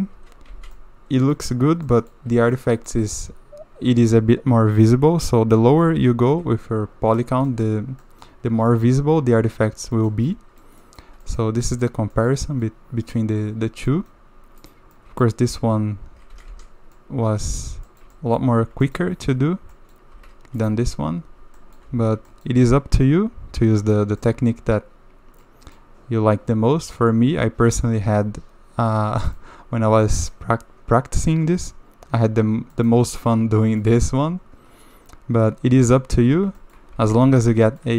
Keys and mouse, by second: 0.5 alt+a, 0.9-1.3 drag, 1.9 drag, 2.5 shift+middle click, 2.7 click, 3.1 shift+middle drag, 6.3 KP_7, 7.5 shift+middle drag, 8.0 middle drag, 8.7 shift+middle click, 10.0 shift+middle drag, 10.3-10.6 middle drag, 10.8 middle drag, 11.2 shift+middle drag, 11.7 middle drag, 12.1 shift+middle drag, 12.6 click, 12.9 middle drag, 13.9 click, 14.6 click, 14.9 click, 15.5 Tab, 16.3 a, 16.5 a, 17.0-17.6 middle drag, 17.9 shift+middle click, 18.1 middle drag, 18.8 shift+middle drag, 19.7 middle drag, 20.1 Tab, 20.7 Tab, 21.0 Tab, 21.4 Tab, 21.6 click, 21.9 alt+a, 22.3 shift+click, 24.2 click, 24.4-25.4 middle drag, 25.7-27.7 middle drag, 29.2 shift+middle click, 30.0 shift+middle click, 32.7 middle click, 33.1 shift+middle click, 33.8 middle click, 36.1 Tab, 36.6 shift+middle drag, 36.9 alt+a, 37.2 drag, 37.7 shift+drag.